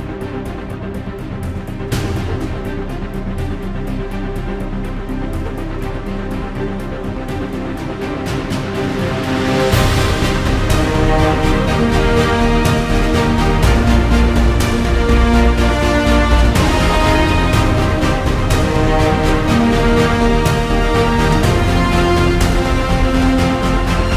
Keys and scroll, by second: 6.5 super+=, 6.7 space, 7.5 [, 11.9 super+z, 14.6 space, 15.7 `.